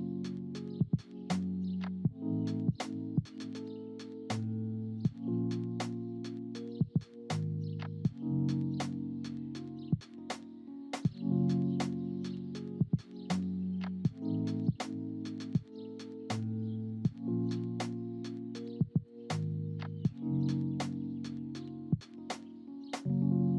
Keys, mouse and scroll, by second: 7.9 space, 8.5 click, 9.1 space, 10.2 drag, 10.8 click, 20.4 space, 21.6-23.5 drag.